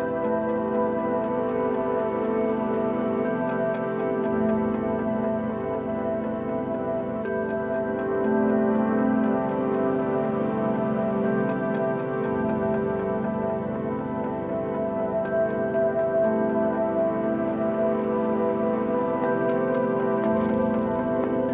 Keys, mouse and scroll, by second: 3.3-4.1 middle drag, 4.1-4.5 scroll up 1, 4.5 2, 4.9 click, 5.6 shift+click, 6.9 ctrl+b, 10.9 middle click, 11.5 scroll up 1, 11.7-12.9 middle drag, 12.9 ctrl+r, 15.9 s, 20.0 3, 20.3 click, 20.9 middle click, 21.4 click.